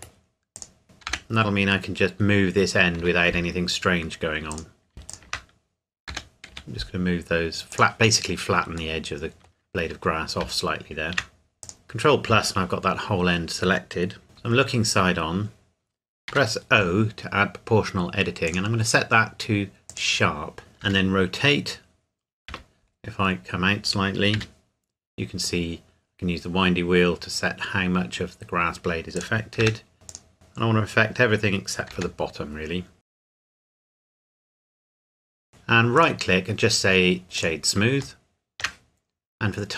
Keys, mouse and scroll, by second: 0.6 click, 1.1 g, 3.0 Escape, 4.5 click, 5.1 shift+click, 6.1 g, 6.5 y, 7.7 click, 9.0 middle click, 11.6 click, 11.8 ctrl+KP_Add, 14.2 KP_3, 14.6-15.1 scroll down 1, 16.3 o, 18.5 click, 20.8 r, 21.9-22.2 scroll down 1, 22.5 Escape, 22.9-23.2 scroll down 1, 23.3 scroll up 1, 23.4-24.3 scroll down 1, 24.3 r, 25.0-25.9 scroll up 1, 26.1-27.3 scroll down 1, 29.1 click, 29.6 g, 30.1 click, 30.3-30.7 scroll up 1, 30.7-31.9 scroll down 1, 31.9 g, 33.6 click, 33.9 r, 34.3 click, 34.6 middle click, 35.1 Tab, 35.3 scroll up 1, 35.9 right click, 37.4 click, 38.2 shift+middle click.